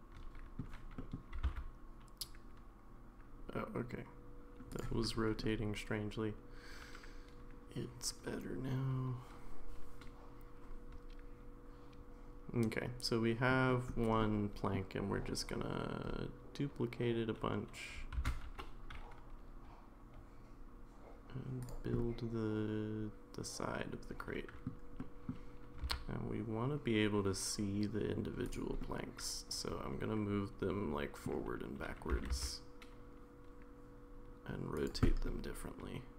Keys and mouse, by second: 1.0 middle click, 1.3 r, 5.4-13.5 middle drag, 14.2 middle click, 22.0-24.7 middle drag, 25.0 middle click, 25.7 g, 28.8-31.3 middle drag, 32.1 r, 35.0-36.1 middle drag.